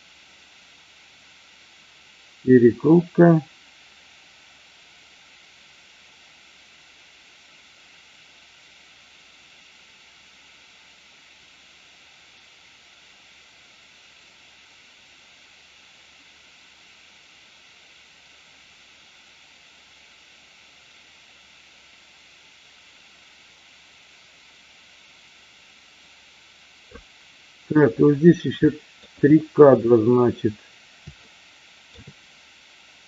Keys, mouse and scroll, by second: 28.5-28.9 shift+middle drag, 31.2-31.9 shift+middle drag.